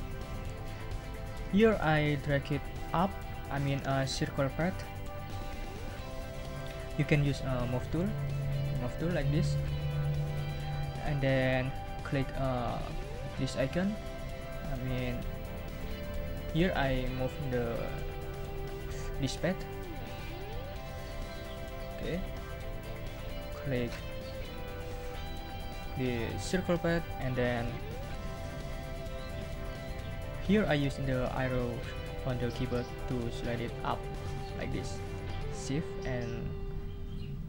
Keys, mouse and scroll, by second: 8.2 click, 9.5 click, 20.8 click, 26.7 click.